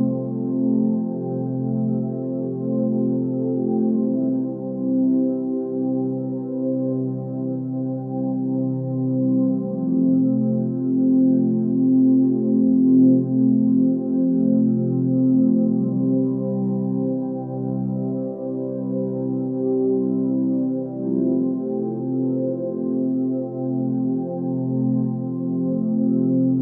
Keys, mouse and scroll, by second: 7.0 click, 8.7-9.3 click, 15.6 space, 16.3 click, 18.9 space, 19.0 right click, 19.2 click, 19.6 ctrl+space, 20.0 ctrl+click, 20.1-20.6 ctrl+space, 20.6 ctrl+space, 21.1 ctrl+click, 21.2 ctrl+space, 23.0 click.